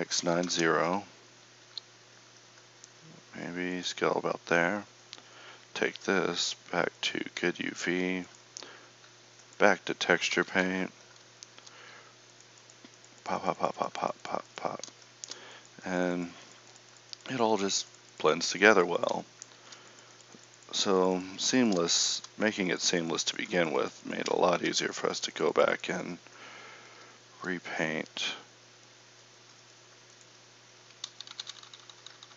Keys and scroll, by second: 1.7 s, 10.4 KP_1, 31.0 ctrl+z, 31.3 ctrl+z, 31.5 ctrl+z, 31.7 ctrl+z, 32.0 ctrl+z, 32.2 ctrl+z.